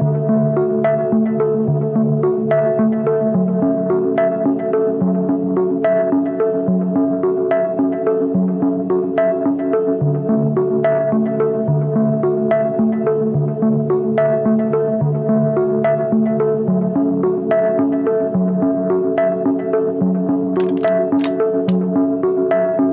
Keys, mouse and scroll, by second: 5.9 shift+click, 9.6 ctrl+z, 10.6 shift+click, 12.8 shift+click.